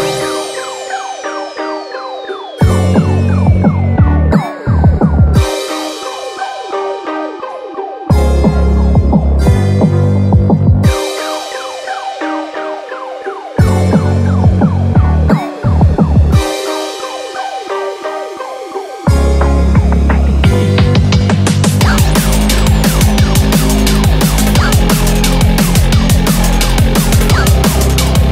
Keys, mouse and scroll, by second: 0.6 scroll down 1, 0.8 middle click, 2.4 click, 3.4 click, 4.3 click, 5.0-5.8 scroll down 1, 5.8 click, 6.7 click, 6.9 scroll up 4, 7.2 middle click, 7.4-7.9 scroll down 4, 7.9 shift+middle click, 12.4 scroll down 1, 12.5 middle click, 13.1 shift+middle click, 13.7 scroll up 3, 16.2 KP_7, 17.4-17.9 scroll down 2, 17.7 middle click, 18.7 Tab, 18.9-19.2 scroll up 4, 19.4 shift+middle click, 19.7 middle click, 20.2 shift+middle click, 20.7 middle click, 21.5 ctrl+KP_7, 23.8 3, 23.9 click, 25.1 i.